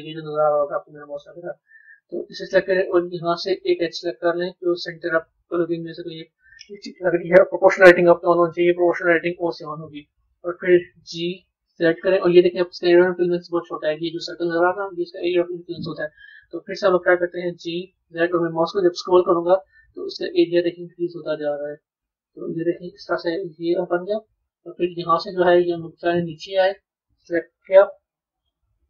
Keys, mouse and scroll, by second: 1.1-3.5 middle drag, 3.5 click, 4.9 click, 9.3 KP_3, 25.1 middle click, 26.6 click, 27.7 KP_3.